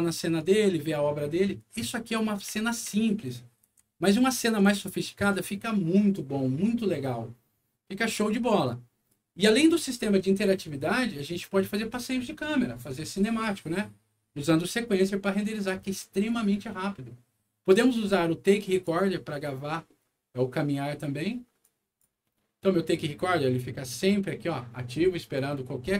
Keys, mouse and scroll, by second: 0.3 right click, 1.7-5.2 right drag, 2.4 w, 3.6 d, 8.4 right click, 18.6 click, 21.6 click.